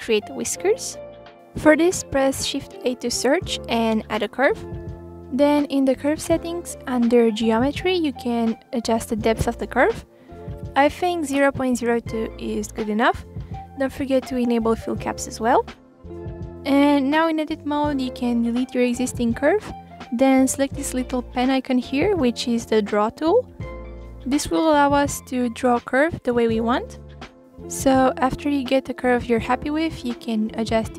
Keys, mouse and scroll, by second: 0.3-1.0 scroll up 4, 1.0 shift+a, 3.5 click, 4.7-6.5 drag, 7.0-7.4 scroll down 1, 7.4-7.7 drag, 7.7-8.9 scroll down 1, 8.9-11.1 drag, 11.6-13.1 scroll up 2, 13.1-14.3 scroll up 1, 14.3-16.6 drag, 18.9 Delete, 20.6-22.2 drag, 22.2 ctrl+z, 22.3 click, 22.9 middle click, 23.3 click, 24.0 ctrl+z, 24.4 click, 24.9 click, 25.2 KP_1, 25.4-25.9 scroll up 2, 25.9 middle click, 26.2 click, 26.7-30.2 typing, 26.9 click, 27.9 click, 28.4 click, 28.9-29.5 scroll down 2.